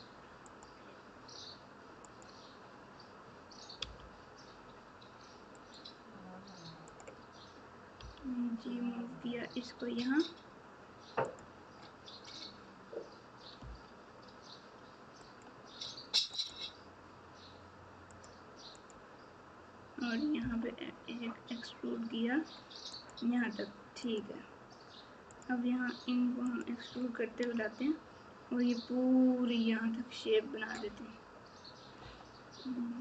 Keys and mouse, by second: 2.0 click, 13.6 e, 16.4 click, 18.8 click, 24.0 click.